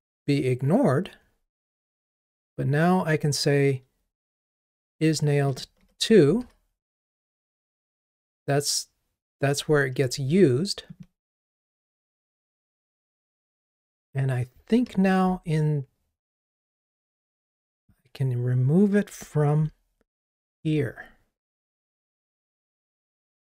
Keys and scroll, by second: 6.5 ctrl+r, 19.7 super+F6.